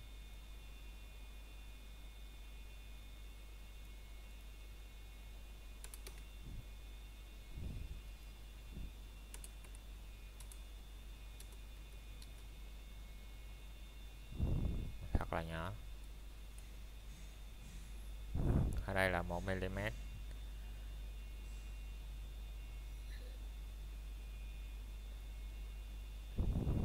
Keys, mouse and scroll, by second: 0.6 click, 6.5 KP_Enter, 8.7 click, 13.5 KP_Enter, 16.0 middle click, 16.5-16.9 scroll down 1, 16.9 middle click, 21.0-21.3 scroll down 1, 21.3 middle click, 21.7 scroll up 1, 22.4 middle click, 23.1-23.5 scroll down 1, 23.5 middle click.